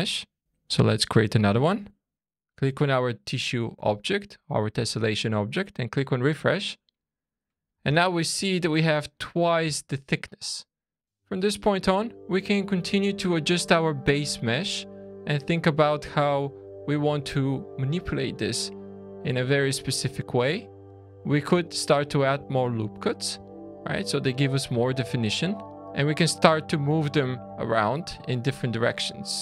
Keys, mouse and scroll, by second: 0.7 click, 2.1 click, 5.9 click, 6.9 scroll up 3, 7.5 scroll down 2, 7.9 shift+middle click, 8.7-9.3 scroll up 3, 9.7 shift+middle click, 11.0 middle click, 11.0 click, 11.0 scroll down 4, 11.0 `, 12.0 scroll down 3, 12.5-12.9 scroll up 3, 12.9 click, 13.4 Tab, 14.1 alt+a, 14.5 2, 14.7 click, 15.6 click, 17.4 1, 17.5 click, 18.3 click, 19.8 click, 21.3 ctrl+r, 23.1 scroll up 2, 23.4 shift+middle click, 24.7 alt+a, 25.1 click, 25.8 click, 26.3 click, 29.1 click.